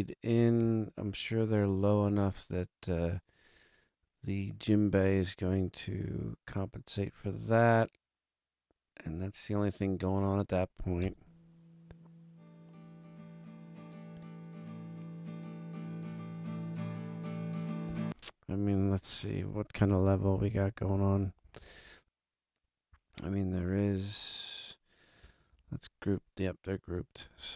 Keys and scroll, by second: 11.0 space, 17.8 space, 18.9 alt+super+space, 19.7 alt+super+], 25.4 super+=, 27.1 super+=.